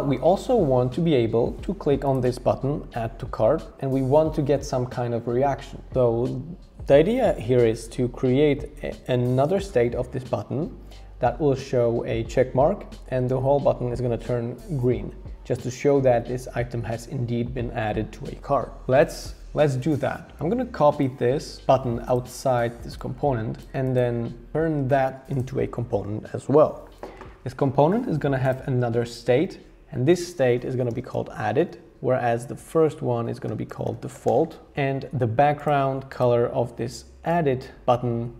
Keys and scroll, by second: 30.4-31.7 typing, 33.4-34.8 typing.